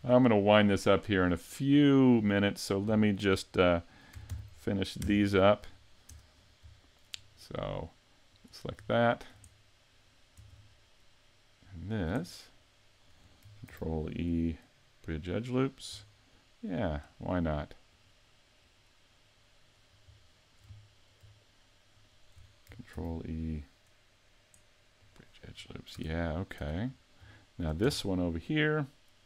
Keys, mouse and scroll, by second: 4.3 ctrl+j, 5.0 Return, 6.1 Tab, 6.4-6.8 scroll up 5, 6.8 shift+middle click, 8.3 right click, 9.0 shift+middle click, 9.6 middle click, 10.6 shift+middle click, 11.8 shift+right click, 12.2 middle click, 13.7 ctrl+e, 16.1 middle click, 17.9 right click, 18.6 right click, 19.1 middle click, 20.2 shift+middle click, 20.8 middle click, 21.9 shift+right click, 22.0 shift+right click, 22.9 ctrl+e, 25.6-26.0 scroll down 3, 26.0 a, 26.6 Tab, 27.4 shift+middle click, 27.9 Tab, 28.1-28.8 scroll up 2.